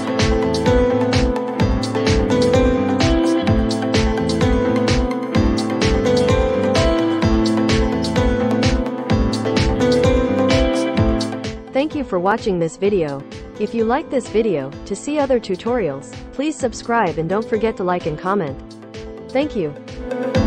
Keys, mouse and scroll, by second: 7.0-10.2 drag.